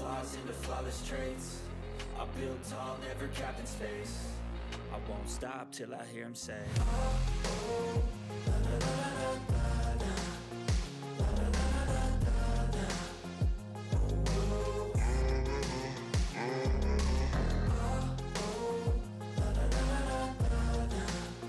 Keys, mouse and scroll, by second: 0.0-2.4 typing, 2.5 ctrl+s, 3.4 click, 6.0 click, 6.5-8.4 typing, 9.2 click, 12.9 click, 12.9 typing, 13.8 ctrl+x, 14.3 click, 14.6 space, 15.1 ctrl+v, 15.4 ctrl+s, 16.2 click, 18.0 click, 18.5-19.0 scroll up 1, 19.6 typing.